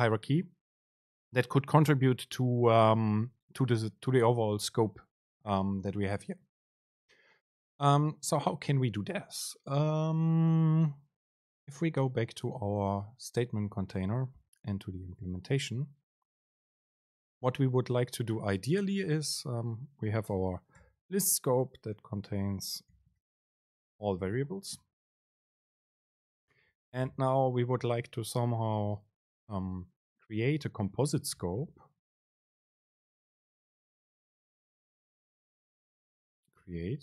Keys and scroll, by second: 19.3 shift+Right, 20.9 alt+super+v, 24.8 Down, 26.3 Left, 27.0 ctrl+shift+super+Left, 27.3 BackSpace, 32.2 super+space.